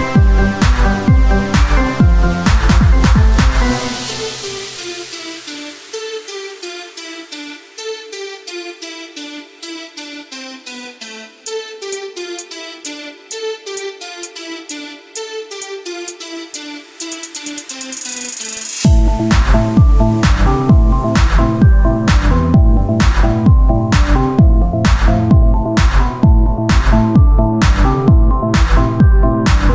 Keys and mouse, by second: 0.4 ctrl+Tab, 4.1 ctrl+b, 6.4 Tab, 7.8 Tab, 7.8 ctrl+r, 9.4 Tab, 10.4-11.6 drag, 18.3 Tab, 18.8 Tab, 18.9 Tab, 22.4 ctrl+r, 23.4 Tab, 24.9-29.3 drag, 29.3 KP_1.